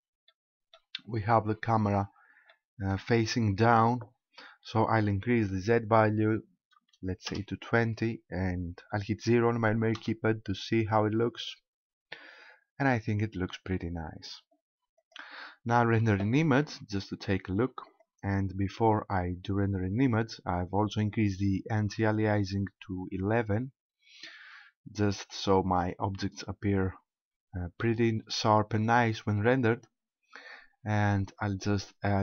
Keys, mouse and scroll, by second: 0.3 middle click, 1.0-1.9 scroll down 4, 2.5 middle click, 5.0 click, 9.9 KP_0, 11.4-12.3 scroll up 3, 12.9-13.7 scroll down 1, 15.0 click, 17.9 click, 32.1 right click.